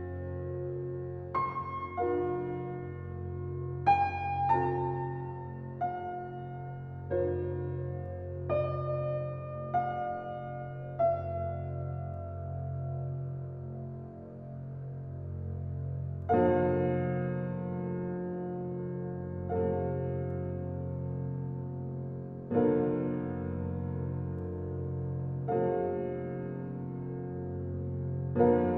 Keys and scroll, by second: 26.8 space.